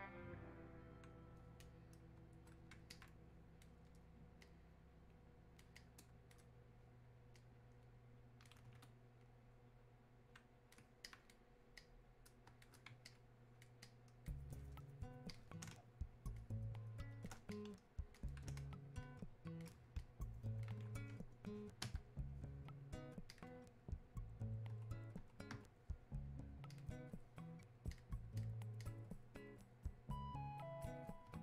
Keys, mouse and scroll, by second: 2.9-4.5 alt+drag, 4.5-5.8 drag, 5.8-11.1 drag, 11.8 click, 13.1 alt+click, 13.9-15.3 drag, 15.7 space, 17.5 click, 18.6 space, 19.1 click, 19.1 space, 20.0-23.3 drag, 23.3 click, 26.7 click, 30.2 click.